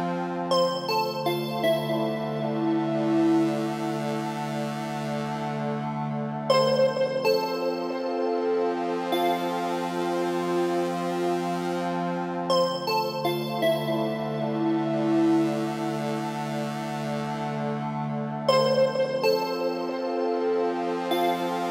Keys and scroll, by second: 13.3 Left.